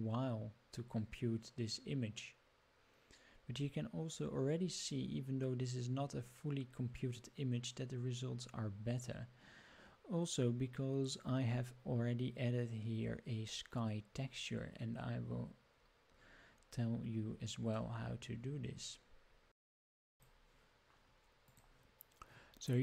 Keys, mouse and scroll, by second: 17.7-20.2 middle drag.